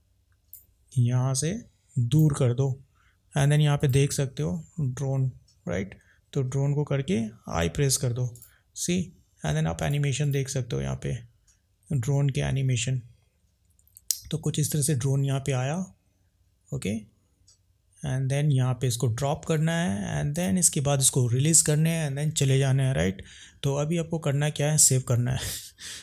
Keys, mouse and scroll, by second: 1.4 click, 3.8 click, 8.4 click, 9.8 click, 10.3 click, 20.4 click.